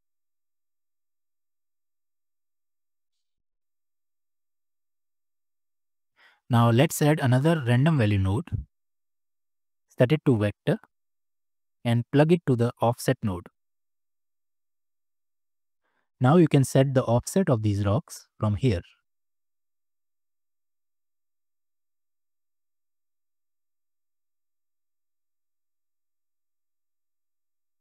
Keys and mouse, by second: 0.2 space, 1.3 click, 2.6-4.4 drag, 5.7 space, 7.1 shift+a, 9.3-10.4 drag, 11.0 click, 12.0-13.9 drag, 15.0-15.7 drag, 18.9 click, 19.7-22.2 drag, 22.8-23.9 drag, 24.5 click, 25.2 ctrl+z, 25.8 Tab, 25.9 click, 26.7 click, 27.1 e.